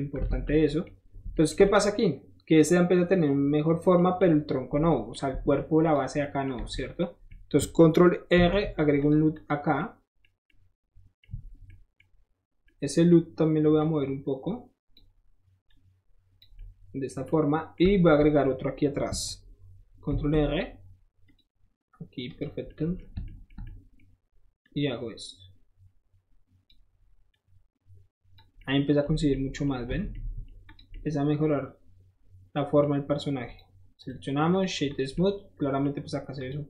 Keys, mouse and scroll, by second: 0.0 scroll down 1, 0.3 alt+z, 4.0 middle click, 4.0 scroll down 1, 4.1 middle click, 5.2 middle click, 5.4 Tab, 5.6 middle click, 5.9 click, 6.1 middle click, 7.0 middle click, 8.3 ctrl+r, 9.0 click, 9.3 click, 9.8 middle click, 11.7 middle click, 12.7 middle click, 13.8-14.9 drag, 15.7 click, 16.6-20.8 middle drag, 20.1 ctrl+r, 21.3 click, 22.3 click, 22.7 middle click, 23.2-24.7 shift+middle drag, 24.7-26.7 shift+drag, 27.3-28.4 drag, 28.6 middle click, 29.3 middle click, 29.7 scroll up 2, 30.0 Tab, 30.1-30.5 middle drag, 30.7 click, 30.9-32.8 middle drag, 33.5 click, 34.0 right click, 34.5 click, 34.9 click, 35.2-35.9 middle drag, 36.0 scroll up 2, 36.4 click.